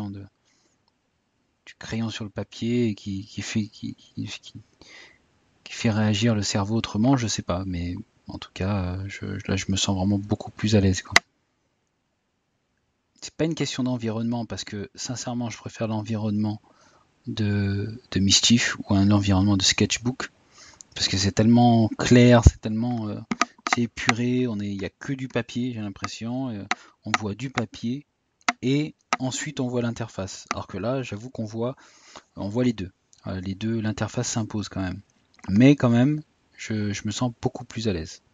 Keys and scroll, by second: 28.4 typing.